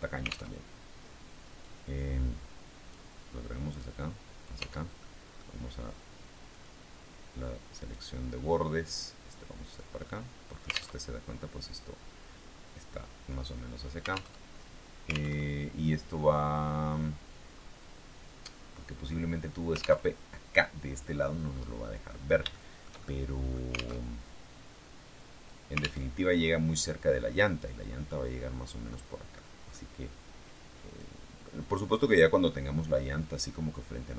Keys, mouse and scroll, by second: 0.4 alt+Tab, 1.6-3.0 drag, 3.7 click, 4.6 Tab, 4.9 middle click, 6.7 click, 7.7 right click, 8.8-9.9 drag, 10.0 middle click, 10.8 alt+Tab, 14.2 alt+Tab, 15.2 alt+Tab, 15.8-16.4 scroll down 2, 17.4 scroll up 2, 18.2-19.5 scroll down 2, 20.0 alt+Tab, 21.4 click, 21.5 middle click, 22.4-23.6 shift+middle drag, 23.9 alt+Tab, 26.0 alt+Tab, 26.0-27.2 alt+scroll down 1, 28.8 click, 29.1 middle click, 29.4-30.4 scroll up 1, 30.8 click, 31.8 middle click, 32.4 middle click, 33.6-34.1 drag.